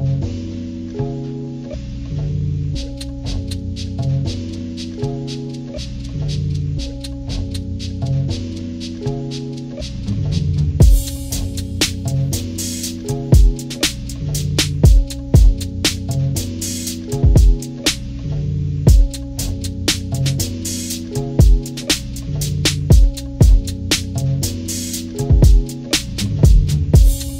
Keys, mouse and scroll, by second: 0.8-2.2 drag, 2.5 ctrl+-, 2.9-4.1 drag, 4.1 scroll down 1, 4.3 click, 4.8 click, 5.2 click, 6.5 click, 6.9 click, 7.0 click, 8.0 click, 8.5 click, 9.6 click, 10.2 ctrl+-, 10.4 ctrl+=, 10.8 click, 11.7 scroll down 1, 11.8-13.3 drag, 13.4 scroll up 1, 13.6 ctrl+-, 13.8 scroll down 2, 14.9 click, 15.3 click, 16.7 click, 17.1 click, 18.2 ctrl+=, 18.2 ctrl+scroll down 2, 18.5-19.6 drag, 19.8 click, 20.1 click, 20.4 click, 20.8 click, 21.3 ctrl+-, 21.5 ctrl+=, 22.0 click, 22.6 click, 23.3 ctrl+-, 23.5 ctrl+=, 23.9 click, 24.1 scroll down 2, 24.7 scroll up 2, 24.8 click, 25.4 click, 26.1 click, 26.6 click.